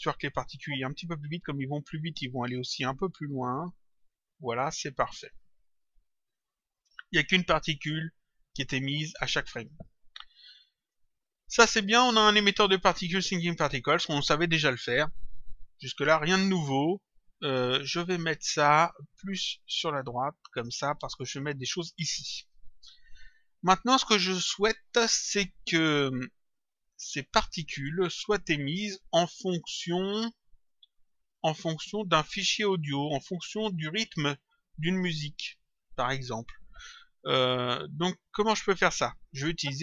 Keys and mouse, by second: 0.3 click, 2.0 click, 9.6 click, 17.6 click, 19.2 click, 29.2 click, 30.5 click, 34.7 click.